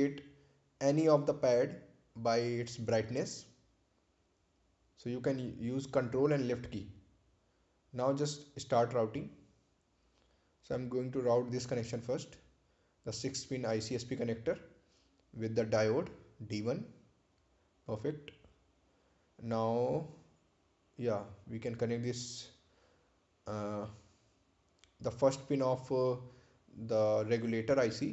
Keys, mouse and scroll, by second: 3.9 scroll up 1, 9.4 click, 16.0 click, 19.1-20.9 scroll down 1, 23.5 click, 26.5 click.